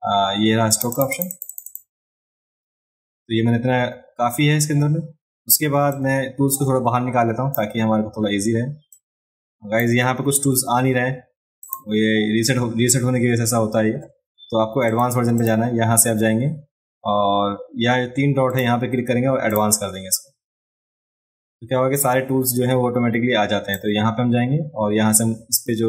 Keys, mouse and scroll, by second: 0.7 click, 0.9 click, 1.1 click, 1.3 click, 1.5 click, 1.7 click, 5.9-7.6 drag, 8.9-9.8 drag, 11.6 click, 14.9 click, 15.4 click, 18.5 click, 19.5 click, 23.7-25.8 drag.